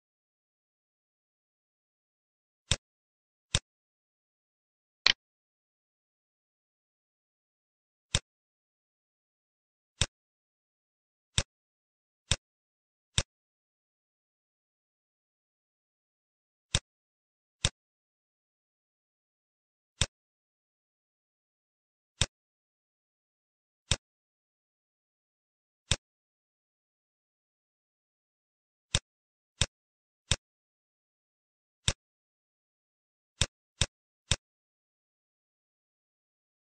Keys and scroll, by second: 0.9 5, 14.9 space, 16.2 b, 19.5 F1, 21.4 ctrl+d, 24.9 ctrl+/, 28.0 ctrl+z, 31.2 ctrl+/, 35.7 ctrl+g.